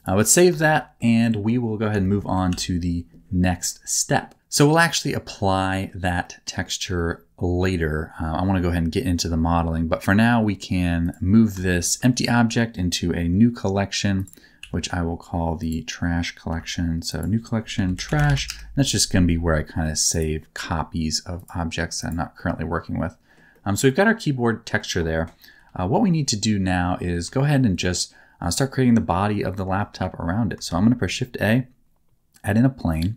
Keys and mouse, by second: 0.8 shift+middle click, 2.1 shift+middle click, 2.5 ctrl+s, 4.7-5.8 middle drag, 6.2 middle click, 6.9 shift+middle click, 11.0 click, 11.6 shift+middle click, 14.1 click, 14.6 m, 15.6 click, 16.4 m, 21.3 click, 22.0 click, 22.3 middle click, 23.5-24.8 middle drag, 25.5 KP_7, 27.3 shift+middle click, 29.7 shift+middle click, 30.6 shift+a.